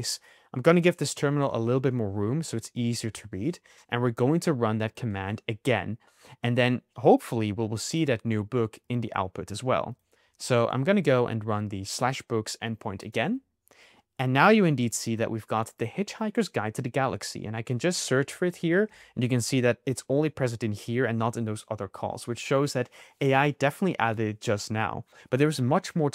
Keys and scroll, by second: 10.9 Up, 18.1 super+c, 18.4 super+f, 18.8 super+v.